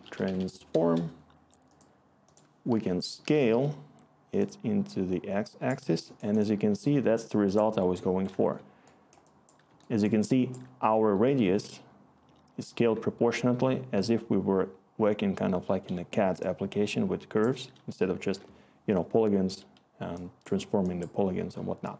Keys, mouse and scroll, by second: 2.6-3.5 typing, 16.9-17.5 click, 17.0 click.